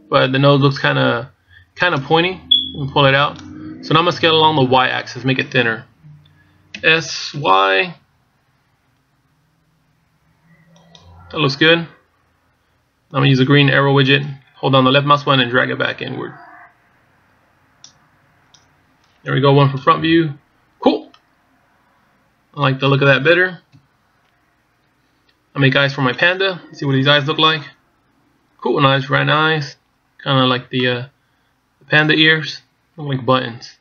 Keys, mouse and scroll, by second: 2.7 click, 7.7 s, 14.0 click, 20.6 KP_1, 21.9 middle click, 24.5 KP_1, 31.6 middle click, 33.1-33.8 scroll up 1.